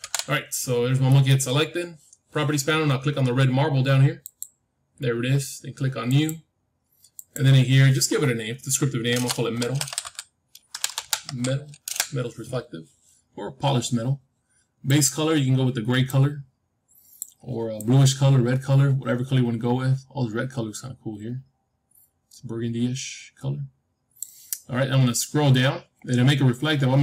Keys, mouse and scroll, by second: 1.0-3.0 middle drag, 3.2-4.2 scroll up 1, 4.2-9.1 drag, 4.2-5.0 scroll up 1, 5.0 scroll up 1, 10.8 BackSpace, 13.9 BackSpace, 14.8-16.8 drag, 25.1-27.0 middle drag.